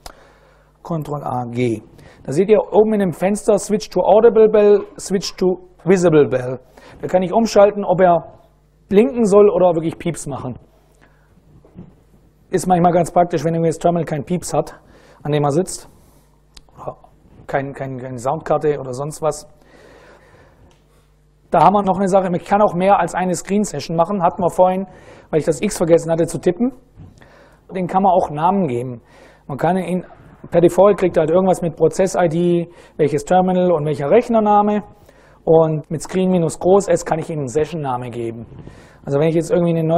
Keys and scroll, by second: 0.8 ctrl+a, 1.0 g, 2.2 ctrl+a, 2.4 g, 3.2 a, 3.7 g, 4.2 ctrl+a, 4.7 g, 5.5 ctrl+a, 6.0 g, 39.9 super+Right.